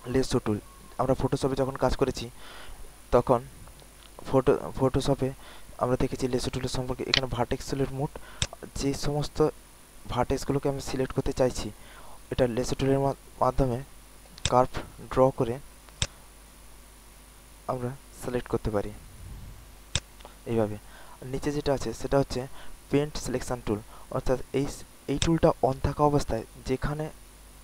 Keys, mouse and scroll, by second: 6.7 alt+middle click, 7.0-8.3 right drag, 8.3-12.9 drag, 13.1 alt+middle click, 13.5 alt+click, 14.1 alt+middle click, 14.4 alt+click, 15.9-19.3 drag, 19.6 alt+middle click, 19.9 alt+click, 25.1-27.6 drag.